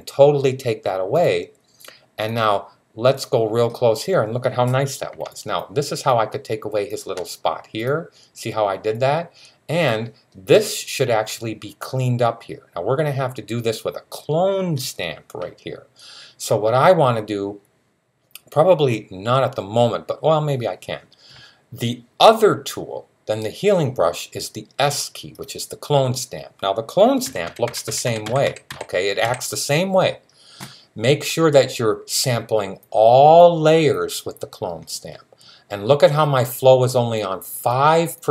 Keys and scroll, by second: 27.0-29.1 typing.